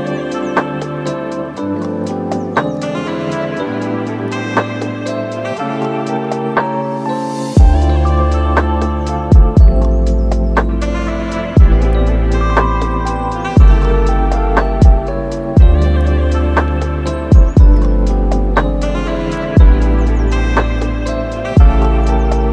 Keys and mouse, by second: 0.0 middle click, 0.2 middle click, 0.8 middle click, 1.7 super+s, 2.0 middle click, 2.1 Tab, 2.4 shift+middle click, 3.0 shift+middle click, 3.3 right click, 4.7 middle click, 5.5 shift+middle click, 5.9 shift+middle click, 6.3 shift+click, 6.7 alt+shift+middle click, 6.9 middle click, 8.1 click, 8.4 shift+middle click, 8.8-10.9 drag, 11.1 middle click, 11.6 Tab, 11.9 middle click, 12.7 super+s, 12.7 middle click, 13.3 Tab, 13.6 click, 14.1 right click, 14.2 right click, 14.3 middle click, 14.8 right click, 15.0 super+s, 15.2 shift+middle click, 16.2 shift+middle click, 16.5 middle click, 16.8 shift+middle click, 18.4 middle click, 19.6 middle click, 19.9 middle click, 20.1 middle click, 20.9-22.0 drag, 22.1 middle click.